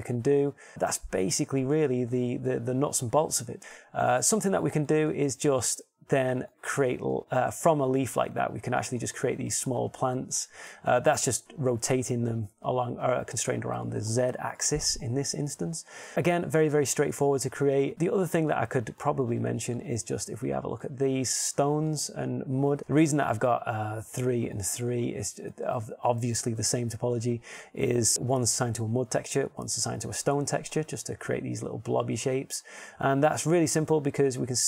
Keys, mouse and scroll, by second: 0.3 Tab, 4.5 middle click, 5.8 middle click, 7.2 middle click, 25.0-33.7 middle drag.